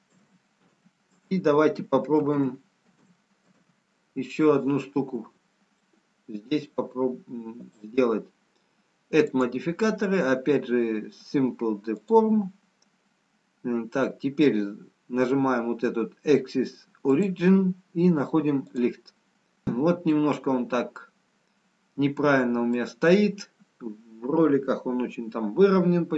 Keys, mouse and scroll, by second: 0.4 ctrl+z, 0.8 ctrl+z, 1.3 ctrl+z, 1.9 ctrl+z, 2.6 ctrl+z, 3.2 ctrl+z, 3.8 ctrl+z, 5.8 middle click, 11.0 click, 17.5 click, 20.3 middle click.